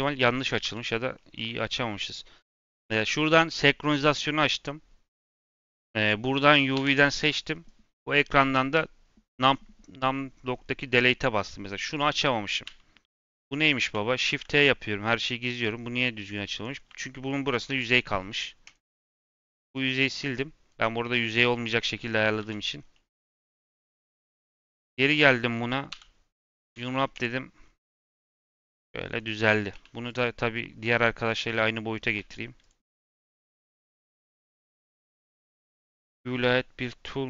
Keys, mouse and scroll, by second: 0.5 l, 1.1-2.5 middle drag, 2.5 click, 5.4 click, 5.6 3, 5.9 click, 6.7 l, 7.4-9.4 middle drag, 9.4 ., 10.4-10.7 scroll down 2, 10.7 middle click, 11.3-11.6 scroll up 4, 11.6-12.6 middle drag, 12.6 /, 13.0 /, 13.6 middle click, 14.5-16.4 middle drag, 16.4 click, 16.7 3, 17.2 click, 17.6 x, 19.9-22.3 middle drag, 22.3 a, 22.7 scroll down 1, 22.9 middle click, 23.4 click, 24.3-25.8 middle drag, 25.8 l, 26.7 u, 27.5-28.0 scroll down 7, 28.0-28.5 middle drag, 28.5 s, 29.4 scroll up 1, 29.6 s, 30.3 scroll up 1, 30.5 middle click, 30.7 g, 31.4 scroll up 2, 31.6-32.1 middle drag, 32.1 s.